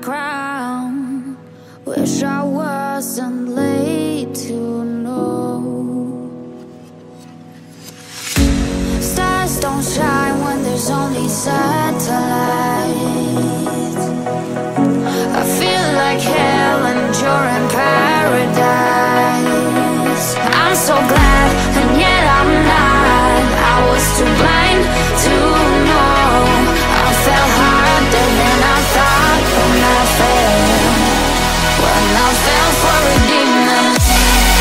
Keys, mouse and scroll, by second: 3.9 middle click, 10.4 middle click, 13.5 middle click, 16.6 middle click, 22.0 middle click, 23.2-23.6 scroll up 1, 24.1 middle click, 27.6 middle click, 28.9 middle click, 31.5 scroll down 1, 31.9 middle click.